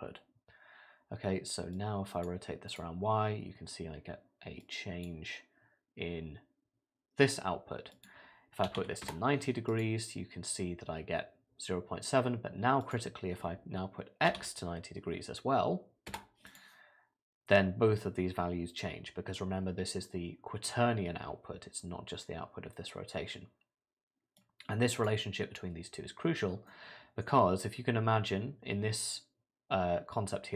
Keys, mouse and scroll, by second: 1.8 click, 2.7 click, 5.8 click, 7.9 click, 9.7 click, 12.8 click, 16.5 click, 24.4 click, 26.7 middle click.